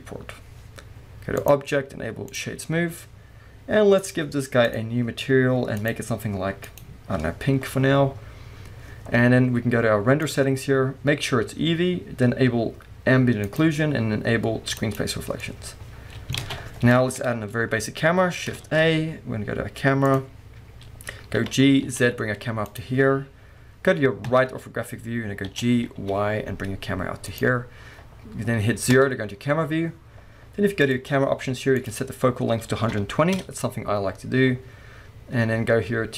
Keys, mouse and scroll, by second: 1.4-4.1 drag, 4.7 click, 5.8 click, 9.1-10.2 scroll up 2, 10.2 click, 13.5 click, 14.8 click, 15.4-22.8 middle drag, 16.4 alt+a, 17.1 KP_1, 17.7-18.6 scroll up 2, 18.6 shift+a, 21.4 g, 22.8 click, 24.3 KP_3, 25.0-25.3 scroll down 1, 25.5-27.4 middle drag, 25.5 g, 27.4 click, 28.9 KP_0, 30.8 click, 31.8-36.1 drag, 33.4 Return.